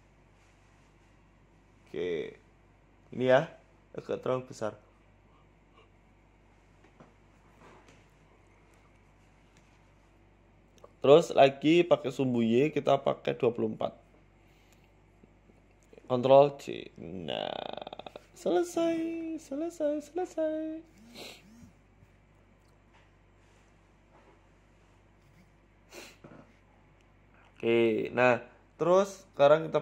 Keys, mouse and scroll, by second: 0.5 s, 1.1 g, 2.4 s, 3.1 g, 4.2 Tab, 4.3 scroll down 3, 4.7 shift+middle click, 5.1 Tab, 5.4 s, 6.2 Tab, 6.6 Tab, 7.2 Tab, 7.7 Tab, 7.9 a, 9.3 click, 10.0 click, 12.7 click, 13.4 click, 13.7-14.3 scroll down 3, 14.0 ctrl+z, 14.7 click, 15.2 Tab, 15.4 scroll down 1, 15.6 middle click, 17.2 shift+right click, 18.0 ctrl+j, 18.4 middle click, 18.6-19.2 scroll down 7, 18.8 middle click, 20.3 middle click, 20.6 right click, 21.0 shift+s, 22.4 shift+a, 25.2 s, 26.3 KP_1, 26.9 click, 27.7 shift+right click, 29.3 ctrl+p.